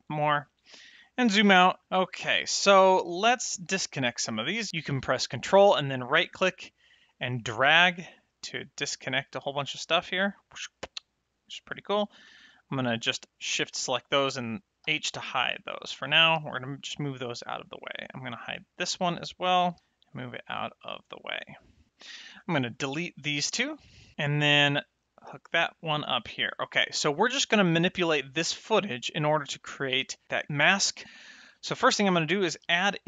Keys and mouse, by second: 1.8 click, 2.8 middle click, 5.9 ctrl+right click, 10.3 ctrl+right click, 11.6 click, 14.8 h, 16.3 g, 17.1 click, 18.8 h, 19.7 g, 20.1 click, 22.1 click, 23.4 x, 24.9 ctrl+shift+click, 32.3 shift+a.